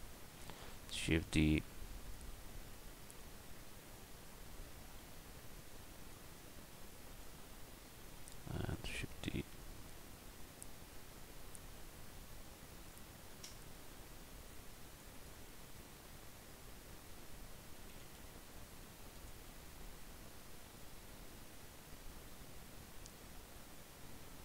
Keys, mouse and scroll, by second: 0.2 shift+d, 8.7 shift+d, 14.5 click, 15.5-17.0 drag, 18.0 r.